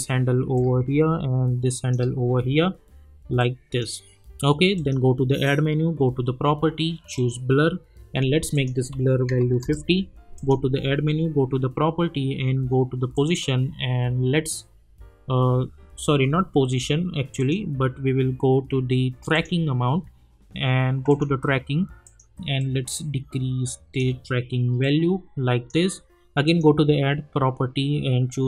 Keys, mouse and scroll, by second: 3.4-4.7 drag, 7.1 click, 9.6 Return, 10.3 click, 13.1 click, 14.0-15.4 scroll down 1, 16.1 ctrl+z, 17.4-28.4 drag.